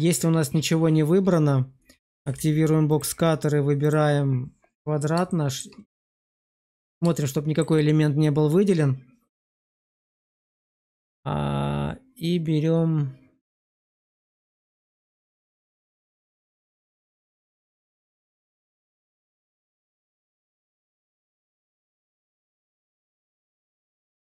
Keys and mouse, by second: 2.1 alt+w, 2.9-4.5 drag, 5.2 shift+middle drag, 7.2-7.5 shift+middle drag, 14.1 drag.